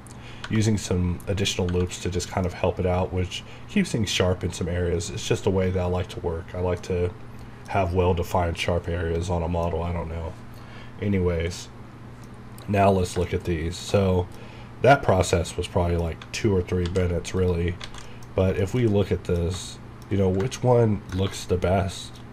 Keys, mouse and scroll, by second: 0.5 Right, 0.7 scroll up 1, 1.6 scroll down 1, 2.0 middle click, 2.5 scroll up 1, 3.0 scroll down 1, 4.2 middle click, 5.0 scroll up 1, 6.8 middle click, 9.0 scroll down 1, 12.3 scroll down 1, 13.3 shift+middle click, 14.6-15.4 scroll down 1, 15.5 middle click, 16.9 alt+v, 17.4 click, 17.8 alt+a, 18.1 middle click, 18.3 scroll up 1, 18.6 shift+middle click, 20.6 shift+middle click.